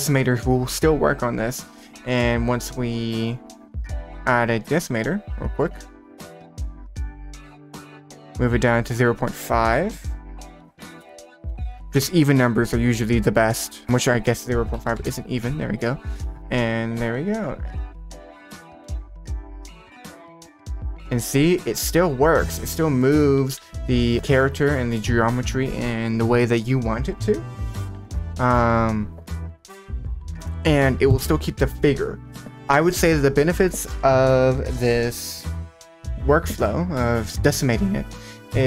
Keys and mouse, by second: 3.3-3.6 drag, 4.8-5.8 drag, 7.3 click, 7.7 click, 8.8-11.1 drag, 12.0 ctrl+s, 13.8-15.1 drag, 16.4 click, 17.4 click, 18.6 r, 18.8 z, 23.0 middle click, 23.6 r, 23.6 z.